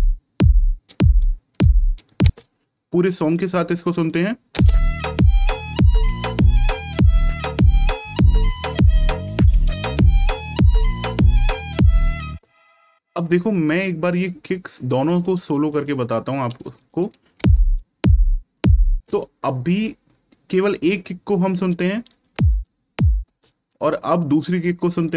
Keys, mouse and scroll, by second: 2.1 space, 3.1 right click, 4.4 space, 5.8 ctrl+scroll down 1, 8.5 click, 12.2 space, 14.1 right click, 16.6 click, 17.3 space, 22.0 click, 22.2 space, 24.4 click.